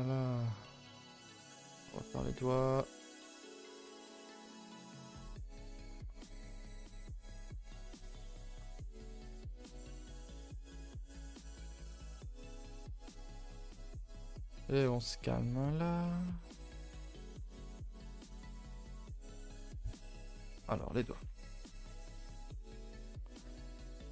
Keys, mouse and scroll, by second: 0.2 shift+click, 0.5 scroll down 2, 0.7 middle click, 1.4-2.8 scroll down 4, 2.8-4.2 middle drag, 4.2 scroll up 2, 4.4 middle click, 4.9 e, 5.8 middle click, 6.4 click, 6.7 shift+click, 7.0 middle click, 7.3 e, 10.1 click, 10.5 s, 10.9 g, 11.8 click, 12.3 g, 13.5 click, 13.6 s, 14.5 s, 15.6 click, 15.9 a, 16.5 Escape, 16.8 ctrl+z, 17.4 s, 18.5 click, 18.7 g, 19.5 middle click, 20.2 click, 20.5 middle click, 21.3 KP_1, 21.8 z, 22.8 shift+middle click, 23.0 scroll up 4, 23.4 g.